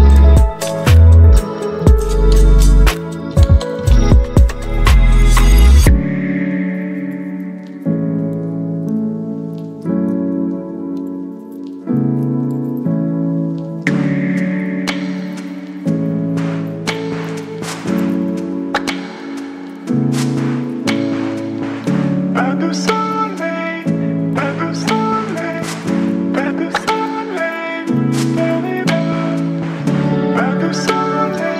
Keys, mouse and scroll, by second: 4.4 t, 6.4 click, 7.9-11.4 typing, 11.7 ctrl+a, 13.5 click, 15.6 ctrl+v, 16.4 Return, 18.7 click, 20.2 v, 20.5 ctrl+t, 22.6-26.5 alt+drag, 26.5 alt+scroll up 3, 27.5 space, 27.5 click, 27.9 space, 28.0 space, 29.1-31.5 drag.